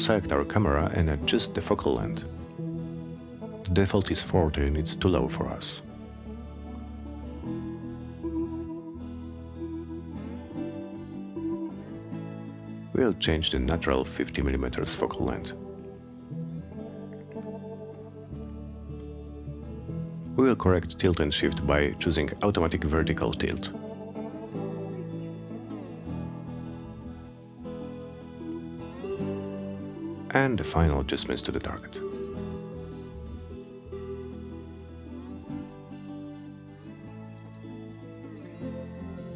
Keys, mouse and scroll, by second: 0.3 click, 4.1 click, 14.7 5, 15.3 0, 16.3 Return, 19.8 click, 25.4 click, 27.0 click, 28.6-34.1 drag, 35.6-39.3 drag.